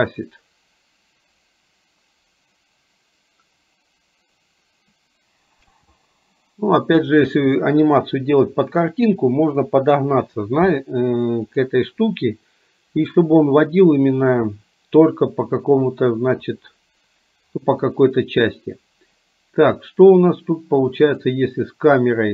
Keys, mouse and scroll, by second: 5.8 space, 20.0 drag.